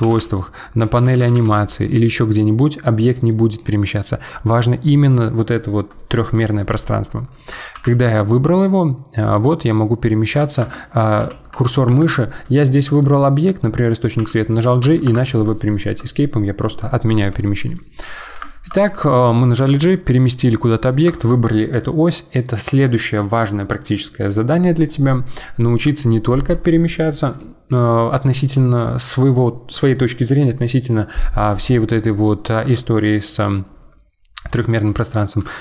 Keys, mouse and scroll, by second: 1.4 g, 7.7 g, 11.2 g, 12.9 click, 14.2 g, 17.7 click, 18.5-18.8 shift+middle drag, 18.8 scroll down 1, 19.1-19.6 middle drag, 19.6 g, 31.8-34.8 middle drag, 35.5-35.6 middle drag.